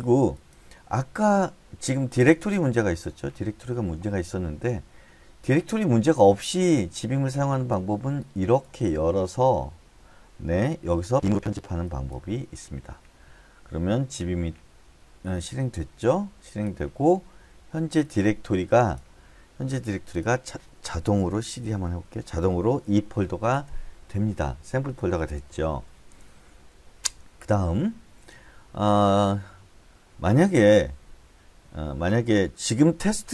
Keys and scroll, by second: 21.4-22.5 typing.